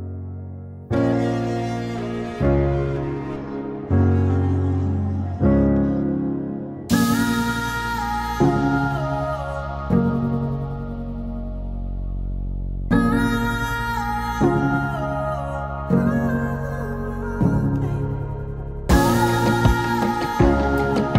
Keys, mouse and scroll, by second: 0.6 click, 0.6-11.1 drag, 11.1-12.9 drag, 12.9-19.4 drag, 20.0-20.7 typing, 20.1 click.